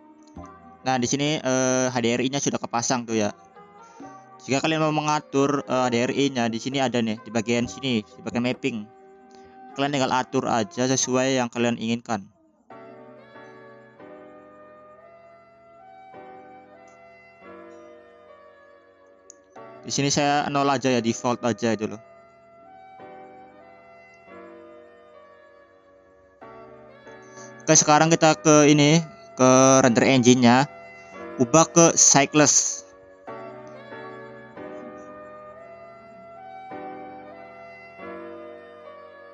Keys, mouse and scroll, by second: 0.0 click, 1.8 click, 5.0-5.7 scroll up 3, 5.7 middle click, 15.3-18.4 drag, 18.8-20.4 drag, 21.2 drag, 22.2-22.5 scroll down 2, 22.5 scroll up 1, 22.8-24.0 scroll down 2, 24.0-25.9 middle drag, 27.0-28.3 scroll up 4, 30.8-39.3 drag.